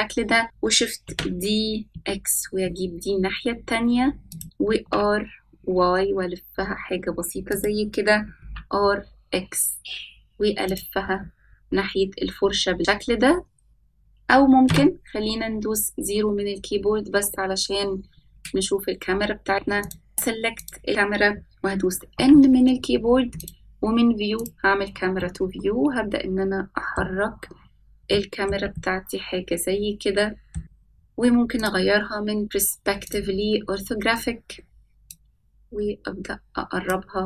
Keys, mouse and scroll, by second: 1.0 shift+d, 4.5 r, 8.1 r, 13.7 middle click, 14.7 KP_0, 18.1 scroll up 2, 19.9 scroll up 1, 20.0 click, 20.9 click, 22.6 n, 23.9 click, 24.8 click, 25.6-27.5 middle drag, 27.8-28.3 scroll up 2, 28.7-29.0 shift+middle drag, 29.2-31.0 middle drag, 32.1-33.6 drag, 35.6-37.2 drag.